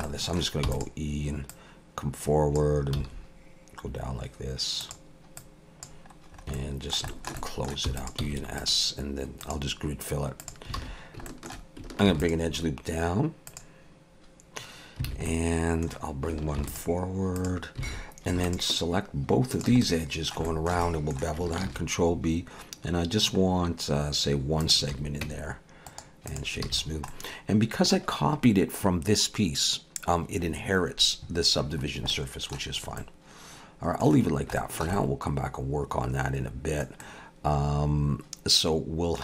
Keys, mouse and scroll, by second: 0.0 middle click, 0.6 e, 1.5 click, 3.0 s, 5.4 click, 6.3 scroll up 2, 6.6 middle click, 7.1 shift+middle click, 7.9 e, 8.2 s, 9.4 click, 10.8 alt+a, 11.3 shift+middle click, 12.1 ctrl+r, 15.1 alt+a, 15.3 middle click, 16.6 ctrl+r, 17.9 alt+a, 18.4 alt+shift+click, 19.8 middle click, 20.5 shift+middle click, 20.8 middle click, 21.7 ctrl+b, 24.9 alt+a, 25.2 Tab, 25.9 right click, 26.7 alt+a, 26.8-27.4 scroll down 3, 27.1 middle click, 31.9 scroll down 1, 32.1 middle click, 32.7 scroll up 2, 33.0 middle click, 34.2 scroll down 1, 34.6 shift+middle click, 34.9 middle click, 37.0 middle click.